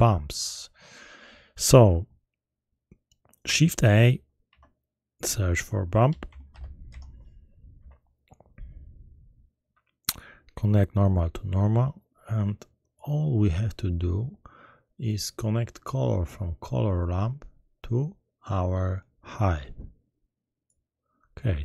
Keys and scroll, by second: 4.4 shift+a, 6.0 b, 6.2 u, 6.5 m, 6.9 p, 7.7 Return.